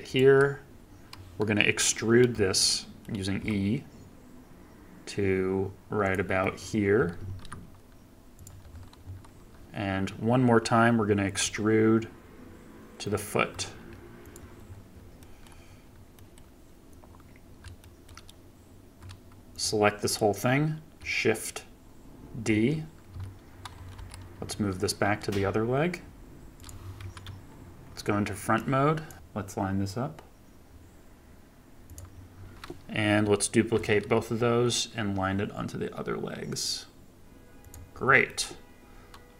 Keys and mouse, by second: 1.5 middle click, 2.5 shift+middle click, 3.3 e, 6.3 shift+middle click, 7.3 g, 11.3 e, 15.1 shift+click, 16.1 shift+middle click, 17.7 shift+middle click, 19.5 click, 22.4 shift+d, 27.2 KP_1, 33.7 shift+d.